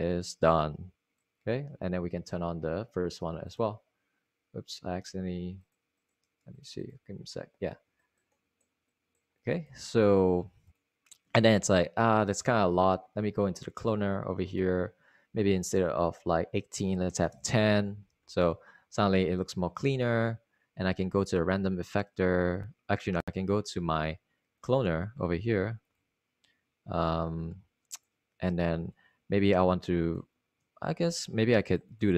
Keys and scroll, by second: 16.7 super+a, 17.6-18.4 typing, 31.9 super+z.